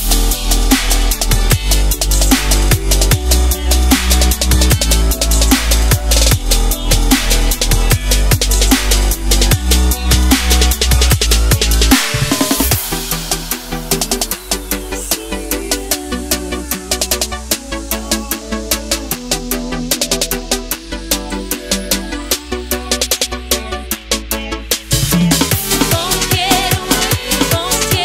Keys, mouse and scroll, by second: 1.4 click, 6.3 ctrl+shift+s, 8.2 click, 14.0 ctrl+z, 14.9 click, 16.1 s, 17.6 click.